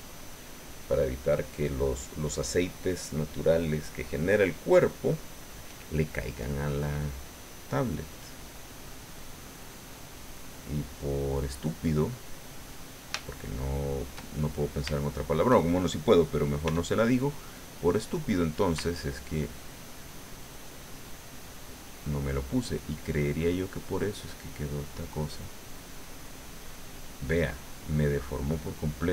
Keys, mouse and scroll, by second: 8.8-10.2 drag, 13.1-14.8 shift+drag, 14.9 shift+click, 16.6 f, 18.0 click, 19.3-21.3 ctrl+drag, 21.8-24.0 ctrl+drag, 24.1 ctrl+middle click, 24.5 click, 25.0-26.1 middle drag, 26.2-28.4 middle drag.